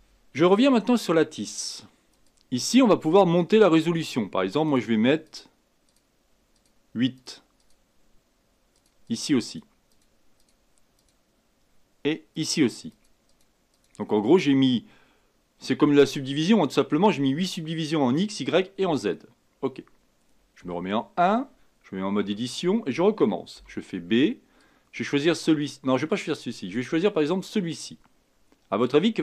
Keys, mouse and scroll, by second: 0.6 Tab, 2.1 click, 4.6-15.8 drag, 15.8-18.9 middle drag, 20.6 KP_1, 22.2 Tab, 23.5 b, 27.2 click.